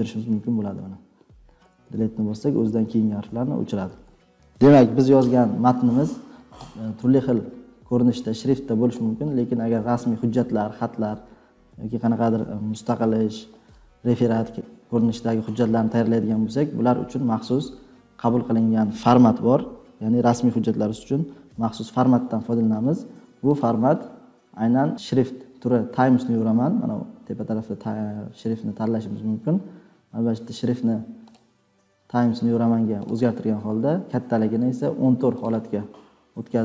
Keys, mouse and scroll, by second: 0.2 Delete, 0.6 Delete, 1.6 Delete, 1.8 Delete, 3.2 BackSpace, 3.8 BackSpace, 4.0 BackSpace, 23.5 click.